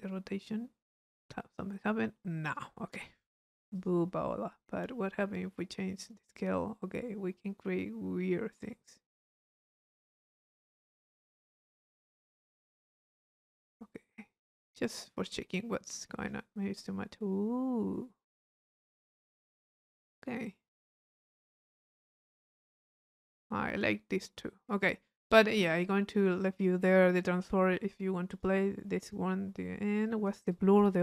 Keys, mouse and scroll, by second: 2.5 click, 4.8-8.9 middle drag, 4.8-6.4 scroll up 1, 6.4-7.3 scroll up 1, 7.3-7.8 scroll up 1, 7.8-8.6 scroll up 1, 8.6 scroll up 1, 22.9-24.2 drag, 25.3-26.7 drag, 27.2 click, 28.3 click, 28.9-30.0 middle drag, 30.0-31.0 drag.